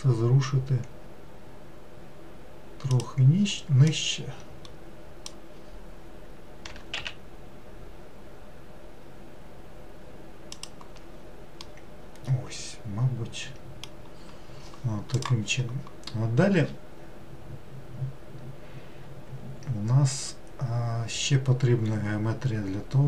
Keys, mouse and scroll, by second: 3.9 click, 6.7 g, 11.6-14.7 middle drag.